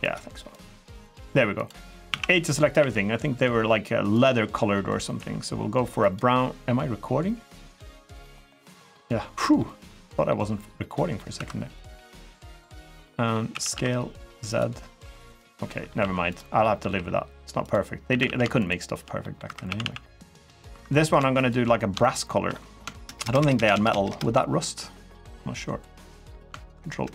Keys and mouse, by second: 0.9 g, 1.3 click, 1.6 middle click, 1.8 a, 2.5 g, 3.9 click, 4.9 g, 4.9 g, 5.8 click, 9.3 middle click, 9.8 middle click, 10.7 middle click, 11.1 2, 11.6 click, 12.8 middle click, 13.3 s, 13.5 z, 14.2 click, 14.8 2, 15.4 middle click, 15.8 1, 16.1 click, 16.4 middle click, 16.7 g, 17.4 click, 17.9 a, 18.0 a, 18.4 alt+shift+click, 19.0 middle click, 19.2 3, 19.4 a, 19.6 a, 20.2 middle click, 20.5 3, 20.9 click, 21.2 shift+click, 21.8 shift+click, 22.3 click, 22.8 ctrl+KP_Add, 23.2 ctrl+KP_Add, 23.5 ctrl+KP_Add, 23.7 ctrl+KP_Add, 24.2 ctrl+KP_Add, 24.5 middle click, 25.7 middle click, 26.7 ctrl+KP_Add.